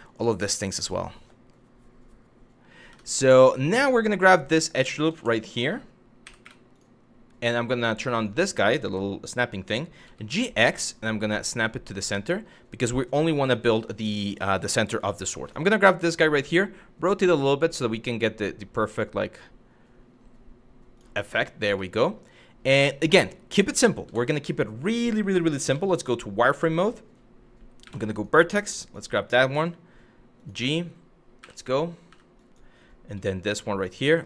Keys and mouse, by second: 2.5 Tab, 3.1 middle click, 3.8 2, 4.3 click, 4.8 ctrl+z, 5.9 w, 6.1 2, 6.3 click, 7.7 click, 9.7 g, 9.9 x, 11.5 click, 13.1 shift+middle click, 14.9 Tab, 15.1 click, 16.0 r, 20.6 click, 21.5 shift+middle click, 23.7 Tab, 25.3 z, 26.3 shift+middle click, 27.5 1, 27.7 click, 28.3 click, 29.2 g, 30.0 click, 31.0 w, 31.7 w, 32.0 click, 32.8 g, 33.7 click.